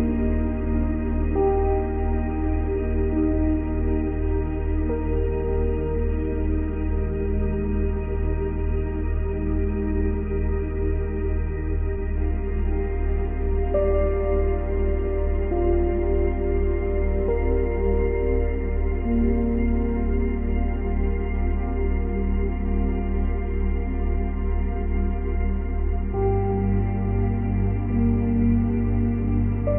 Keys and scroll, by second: 0.4 space, 1.4 space, 22.1 space, 26.4 space.